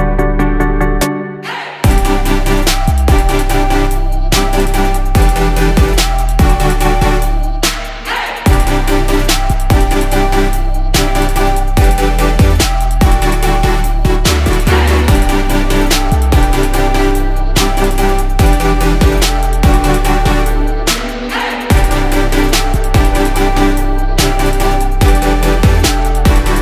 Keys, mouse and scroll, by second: 2.8 click, 3.5 Return, 3.8 BackSpace, 5.8 click, 7.3 Left, 7.6 Left, 7.7 Left, 7.8 Left, 10.4 shift+click, 11.5 click, 14.4 Down, 16.5 click, 18.9 Left, 22.6 Left, 23.1-26.6 drag.